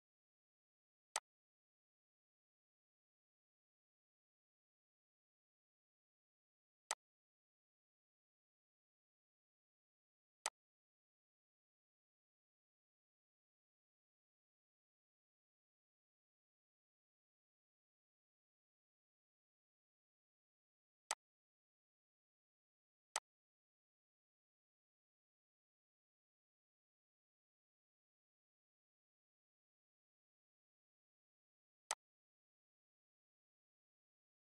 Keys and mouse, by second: 6.5 click, 10.1 click, 11.2 Left, 12.7 Down, 13.4 Up, 13.9 Right, 15.4 Left, 17.1 Down, 18.1 Up, 20.7 shift+click, 24.9 ctrl+g, 26.9 Left, 28.6 Down, 29.5 Up.